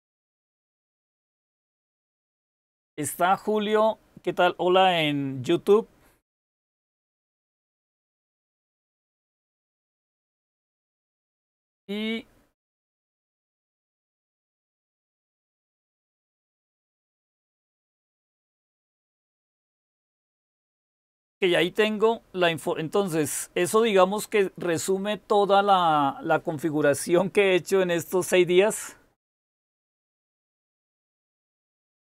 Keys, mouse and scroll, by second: 0.3-1.7 typing.